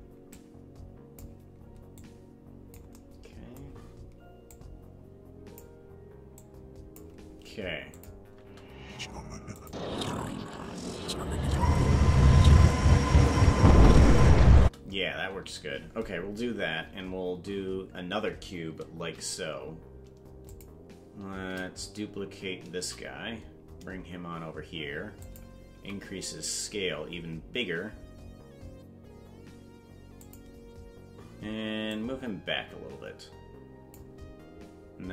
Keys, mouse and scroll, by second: 0.3 click, 2.0 click, 4.5-5.6 drag, 6.3 click, 8.0 click, 8.3 space, 9.7 click, 14.6 space, 20.4 click, 21.3 shift+d, 22.9 shift+d, 25.7 s, 31.9-34.0 drag.